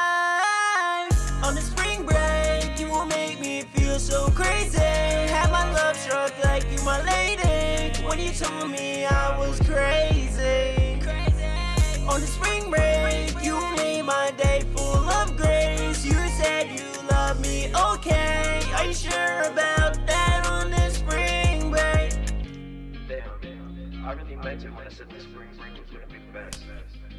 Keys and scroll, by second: 11.9 super+s, 13.9 super+s.